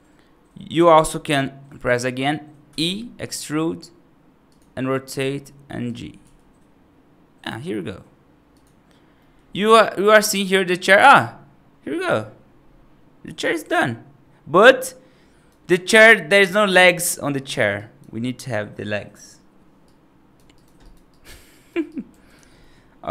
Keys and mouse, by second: 1.1 middle click, 2.5 e, 5.0 r, 6.1 g, 9.1 middle click, 9.4-15.4 right drag, 17.6 right click, 19.7 right click, 20.4 right click, 20.7 right click, 20.9 right click, 21.4 right click, 21.8 right click, 22.5 middle click.